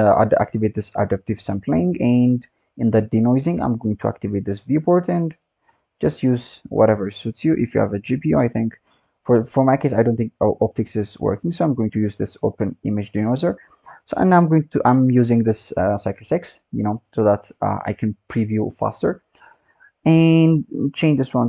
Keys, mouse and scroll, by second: 1.3-3.7 drag, 4.7-12.1 drag, 13.2-13.8 scroll down 1, 13.8-16.8 scroll down 5, 17.6-18.6 drag, 18.6-20.4 scroll down 1, 20.4-21.4 drag.